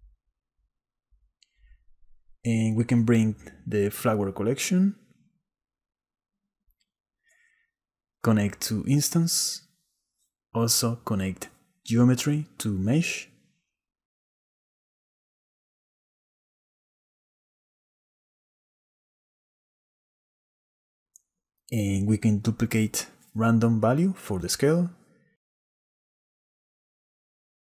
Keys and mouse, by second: 1.0 click, 4.5 click, 7.4 click, 9.3-9.9 drag, 10.4 click, 11.4 click, 12.2 click, 12.3-13.0 drag, 14.0 click, 15.8-17.2 middle drag, 18.2 shift+middle click, 18.9 shift+click, 19.1 shift+click, 20.2 click, 22.0 middle click, 22.8 click, 24.3 click, 25.0 shift+d, 26.5 click.